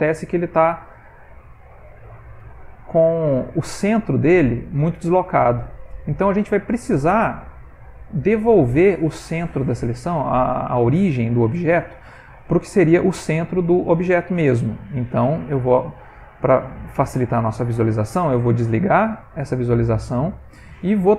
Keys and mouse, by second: 0.2 click, 0.6 middle click, 1.5 alt+click, 1.9 middle click, 2.9 g, 5.7 middle click, 7.8 ctrl+middle click, 8.0 middle click, 8.3 ctrl+middle click, 10.0 ctrl+middle click, 10.6 ctrl+middle click, 11.0 ctrl+middle click, 12.3 middle click, 12.6 middle click, 12.9 middle click, 13.1 ctrl+middle click, 13.5 middle click, 13.7 ctrl+middle click, 18.5 click, 19.4 middle click, 20.3 ctrl+middle click, 20.8 middle click.